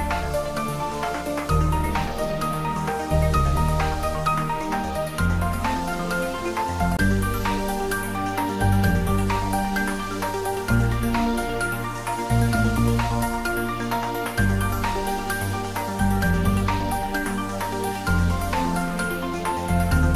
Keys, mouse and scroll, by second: 0.1-2.0 middle drag, 2.0 ctrl+r, 2.8 click, 5.1-6.5 middle drag, 6.5 ctrl+r, 7.1 click, 8.4 middle click, 9.9 ctrl+r, 11.9 click, 13.2 middle click, 14.3 ctrl+r, 15.2 click, 15.5-16.8 middle drag, 16.8 click, 17.5-18.8 middle drag, 18.8-19.6 scroll up 1, 20.0 ctrl+r.